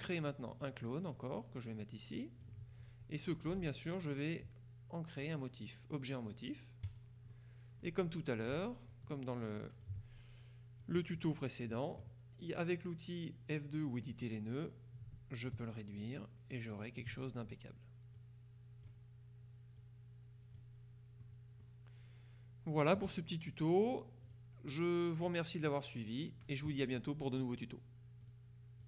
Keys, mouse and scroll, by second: 0.6 click, 3.7 click, 7.0 click, 7.4 right click, 9.0-10.4 ctrl+drag, 14.1 click, 15.6-17.6 ctrl+drag, 18.2 click, 19.9 click, 21.3 middle click, 24.3 click, 25.3 right click, 28.3 click.